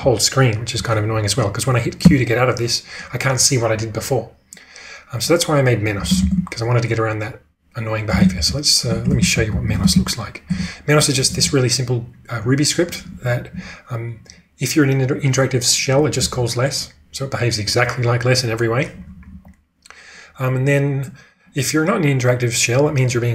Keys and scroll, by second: 2.0 q, 6.1 ctrl+space, 8.1-11.3 typing, 9.0 ctrl+u, 12.7-13.2 typing, 16.0 j, 16.3 j, 19.1 j, 19.2 j.